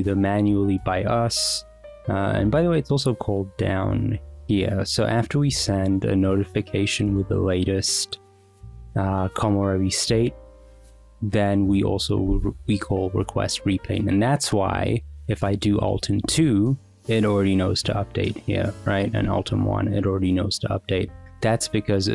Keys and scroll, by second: 16.1 alt+2, 19.4 alt+1.